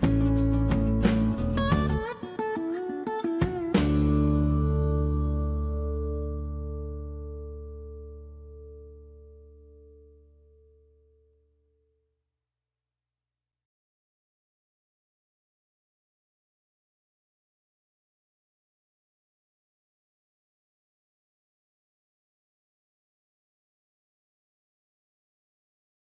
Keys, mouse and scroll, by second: 1.1 shift+r, 2.1 shift+r, 4.5 shift+middle click, 13.6 click, 15.3 shift+x, 16.7 shift+x, 19.8 shift+middle click, 21.2 shift+middle click, 21.7 Delete, 22.9 shift+middle click.